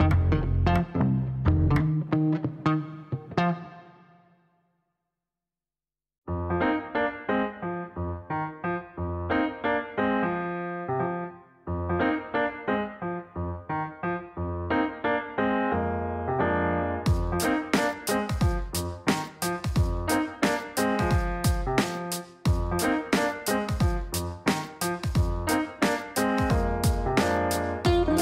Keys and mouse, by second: 0.2 click, 1.5 click, 2.4 click, 3.5-5.4 typing, 9.7 shift+-, 10.8 shift+c, 12.4 click, 12.5 click, 12.6 click, 13.5 KP_2, 13.8 KP_Enter, 18.5 click, 18.6 click, 19.6 click, 21.4-24.1 typing.